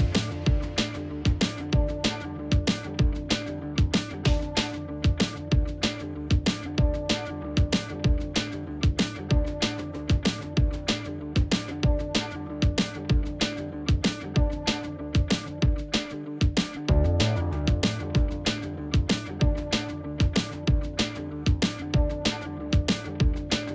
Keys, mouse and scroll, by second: 4.3 right click, 6.3 double click, 6.5 space, 14.2 double click, 17.9 space, 18.3 double click, 18.4 space.